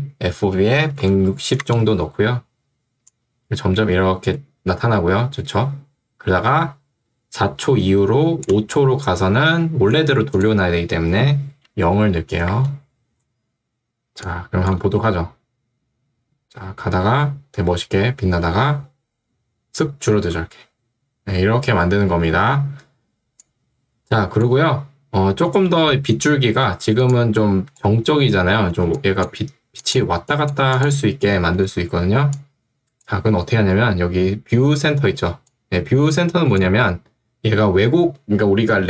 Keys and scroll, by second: 0.7 1, 1.1 0, 1.7 Return, 12.1 0, 12.5 Return, 14.8 space, 20.2 space, 28.7 2, 31.7 Escape, 35.3 ctrl+2.